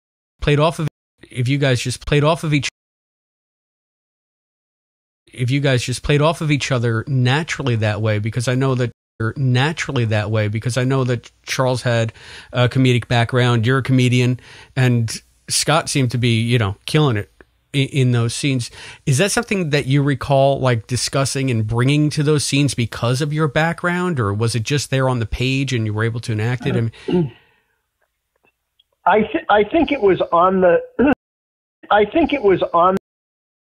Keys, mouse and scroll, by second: 0.3 space, 0.8 space, 1.0 click, 1.1 space, 2.6 space, 2.7 click, 3.8 click, 5.1 click, 5.1 space, 6.8 ctrl+s, 8.0 click, 8.8 space, 9.1 click, 9.1 space, 10.4-11.5 drag, 12.0 click, 15.4-18.0 drag, 18.4 click, 19.5 click, 20.8-21.9 drag, 22.8 click, 23.6 click, 24.8 ctrl+s, 25.9-27.1 drag, 27.5 click, 28.4 click, 29.3 click, 31.0 space, 31.6 click, 31.8 space, 32.4 click, 32.9 space, 33.5 Delete.